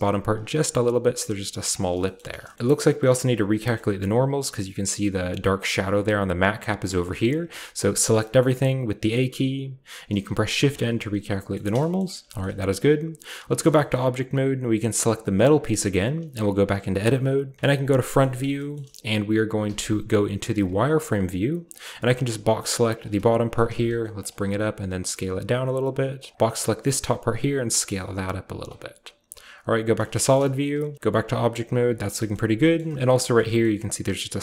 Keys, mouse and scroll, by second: 0.3-1.8 drag, 1.8 shift+middle click, 1.8-2.5 scroll down 1, 2.5 shift+middle click, 2.8 shift+middle click, 3.1 shift+middle click, 3.7 shift+middle click, 3.8-5.7 shift+scroll up 1, 7.2 shift+middle click, 7.2-8.5 shift+scroll down 1, 7.7 typing, 8.4 middle click, 8.5-9.8 shift+scroll up 1, 8.9 typing, 10.5 typing, 11.5 shift+middle click, 11.9 shift+middle click, 12.2-13.1 shift+scroll up 1, 13.1-13.7 scroll up 1, 13.4 Tab, 13.7 shift+middle drag, 15.3 middle click, 15.4-17.6 shift+right drag, 16.3 Tab, 17.6 KP_1, 18.2-19.6 shift+scroll up 1, 18.2-20.7 shift+middle drag, 19.6-20.7 shift+scroll up 1, 19.6 z, 20.1 z, 20.1 z, 21.9-24.1 drag, 23.0-24.4 typing, 24.2-26.1 drag, 26.2 click, 26.3 shift+middle click, 26.3-27.2 shift+scroll down 2, 27.4 typing, 28.5-29.8 drag, 28.7 scroll down 1, 29.3 typing, 29.8-31.0 scroll down 2, 29.9 middle click, 30.4-32.0 typing, 31.0-32.4 shift+scroll up 2, 32.0 middle click, 32.3 shift+middle drag, 32.7-33.2 shift+middle drag, 32.8 scroll up 1, 33.3 shift+middle drag, 33.5 shift+scroll up 1, 33.5 typing.